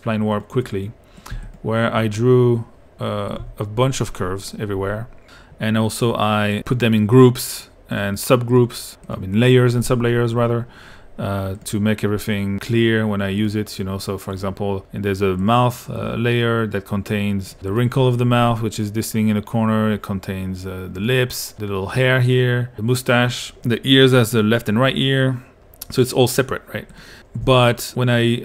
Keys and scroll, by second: 1.3 l, 3.4 p, 27.5 q.